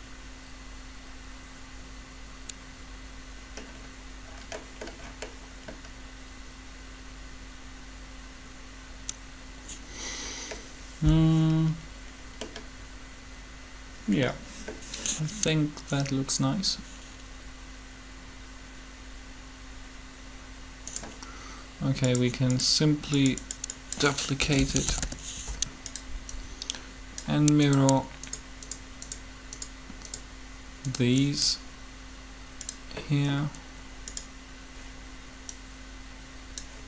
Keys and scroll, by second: 24.2-24.8 typing, 26.4 typing.